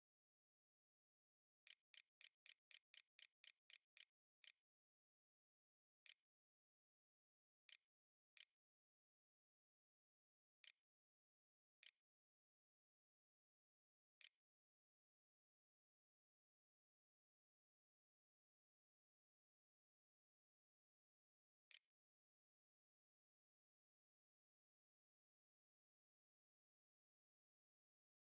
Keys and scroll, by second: 1.1-4.0 typing, 5.3-11.6 typing, 12.9 w, 13.9 Tab, 14.2-15.6 typing, 21.5 ,, 22.9-23.8 typing.